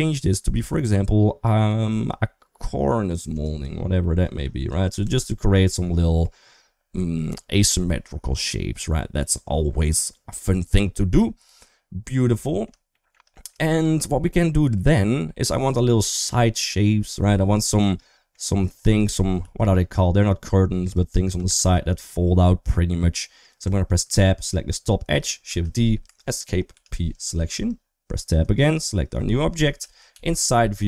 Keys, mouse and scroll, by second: 3.8 middle click, 4.6 shift+middle click, 4.8 Tab, 5.7 middle click, 12.1 middle click, 12.7 shift+middle click, 13.2 middle click, 13.5 shift+middle click, 15.1 middle click, 16.1 middle click, 16.9 middle click, 17.6 middle click, 18.4 middle click, 19.2-21.1 d, 19.4-20.7 drag, 21.4 ctrl+z, 23.0 middle click, 23.4 Tab, 24.0 2, 24.2 click, 25.3 shift+d, 26.5 p, 27.4 Tab, 28.3 click, 29.6 KP_3, 29.9 KP_1, 30.5 Tab.